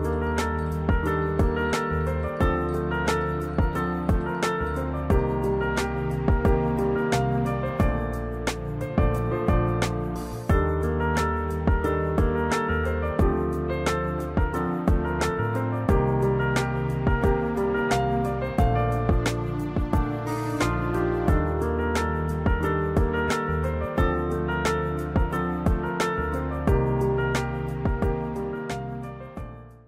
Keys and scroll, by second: 17.8 3, 18.3 -.